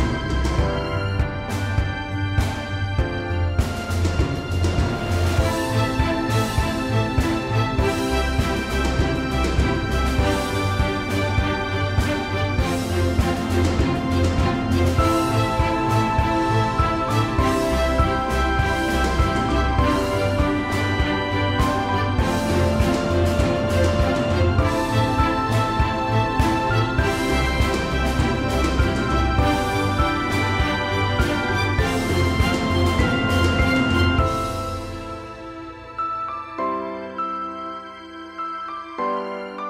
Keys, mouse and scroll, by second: 3.1 p, 5.0 v, 5.5-6.1 drag, 7.0-7.6 alt+shift+click, 8.1-8.9 click, 9.1-9.7 scroll up 2, 9.3-12.0 typing, 9.8 click, 10.3 scroll up 1, 10.6-11.4 click, 15.0 space, 15.7-16.9 drag, 21.4 ctrl+z, 21.7-22.6 drag, 27.0 scroll down 1, 27.2 space, 28.9 click, 29.9 p, 30.9 click, 33.6 click, 36.4 click, 36.7 scroll up 1, 38.2 v, 38.9 click.